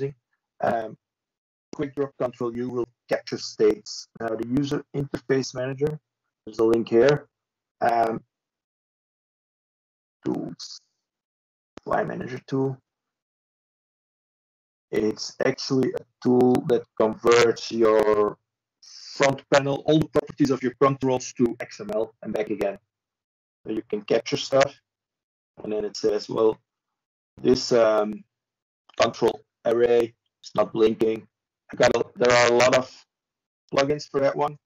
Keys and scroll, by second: 0.6 m, 6.7 ctrl+l, 6.7 typing, 9.1-9.8 shift+Right, 12.2 ctrl+space, 12.4-14.3 typing, 14.6 ctrl+l, 29.8 ctrl+space, 32.6 typing.